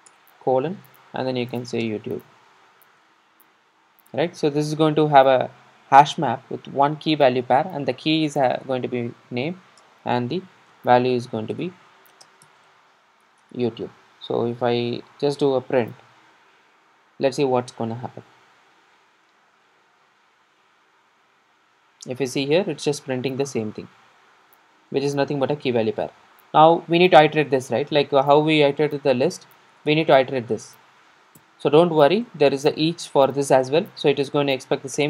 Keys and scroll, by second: 0.2 Return, 11.6 Return, 15.2 super+r, 29.8 Return.